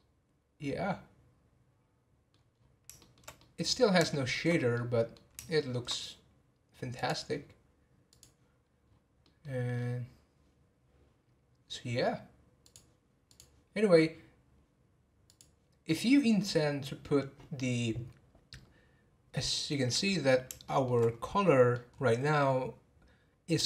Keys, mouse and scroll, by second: 2.5 scroll down 1, 3.0-4.5 shift+middle drag, 4.5 scroll up 2, 4.7-6.9 middle drag, 6.9-8.9 drag, 8.9 scroll down 4, 9.2-9.7 middle drag, 9.7 scroll up 1, 12.7 click, 13.2 click, 15.3 click, 20.6-21.0 shift+middle drag, 21.0-21.4 scroll up 4, 21.4-21.9 middle drag, 21.9-23.6 scroll up 1.